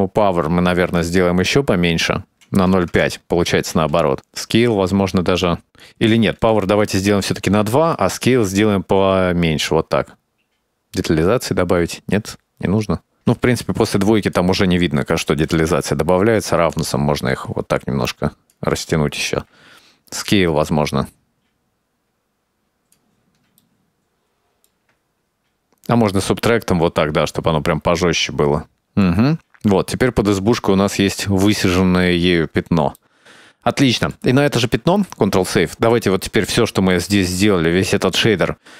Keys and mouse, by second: 0.0-1.9 shift+drag, 2.4 middle click, 2.9 click, 4.0 middle click, 4.6-5.9 shift+drag, 6.5 click, 8.0-10.4 shift+drag, 10.7-13.2 shift+drag, 13.7 click, 14.4 2, 15.3 click, 16.6-18.7 drag, 20.0 shift+click, 20.9 middle click, 21.4-23.2 shift+drag, 23.3 shift+click, 24.2 click, 24.8 click, 25.0 shift+middle click, 25.3 shift+click, 26.2-28.2 shift+drag, 28.8-29.3 middle drag, 30.4-31.2 middle drag, 33.0-34.3 middle drag, 34.8 ctrl+s, 36.5 middle click, 38.3 middle click.